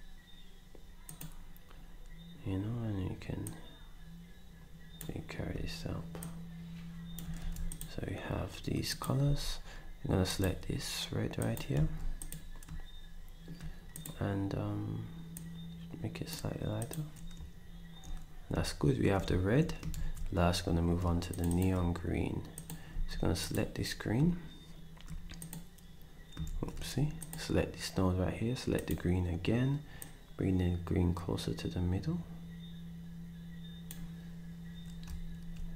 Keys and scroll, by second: 7.4 ctrl+s, 9.2 d, 11.9 s, 19.9 ctrl+shift+s, 22.9 d, 26.5 ctrl+z, 35.4 ctrl+z.